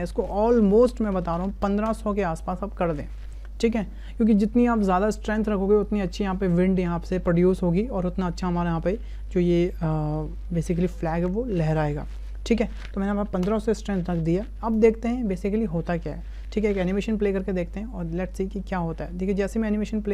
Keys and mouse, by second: 1.8 KP_0, 14.8-18.6 middle drag, 19.0 space.